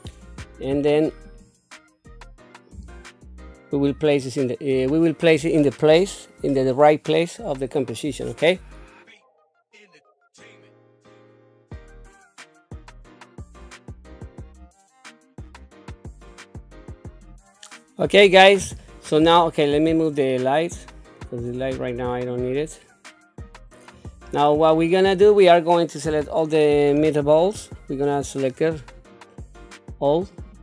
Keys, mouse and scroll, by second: 0.2 click, 1.2 click, 2.7 g, 9.1-16.0 typing, 10.6 click, 11.3 middle click, 12.4 shift+middle click, 13.6 click, 14.5 middle click, 15.8 click, 16.2 scroll down 2, 16.2 middle click, 16.5 middle click, 18.8 middle click, 19.9 click, 20.7 click, 22.1 middle click, 23.6 click, 24.2-25.3 middle drag, 26.1 KP_1, 27.6 shift+middle click, 28.6-30.5 drag.